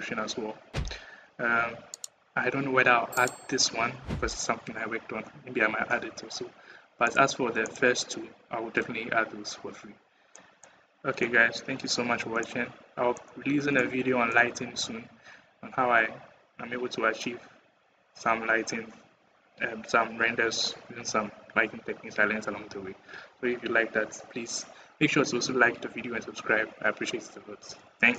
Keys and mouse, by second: 6.9-8.1 drag, 10.1 middle click, 12.5 middle click, 12.7 middle click, 12.9 middle click, 13.8 middle click, 14.0 middle click, 14.6 middle click.